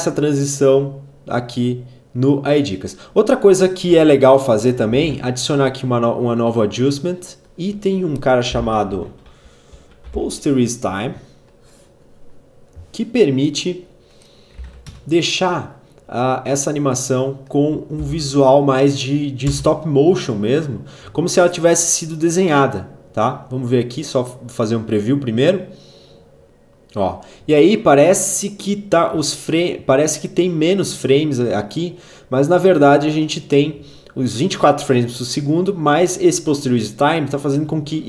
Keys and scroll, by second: 8.0-10.3 typing, 14.3 1, 14.5 Return, 17.6 n, 19.1 space.